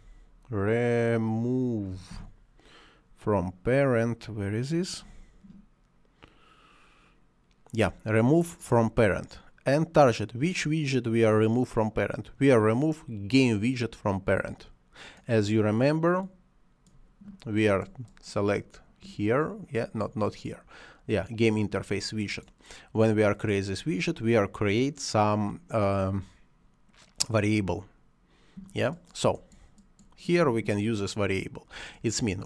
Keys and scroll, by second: 2.0 m, 2.1 o.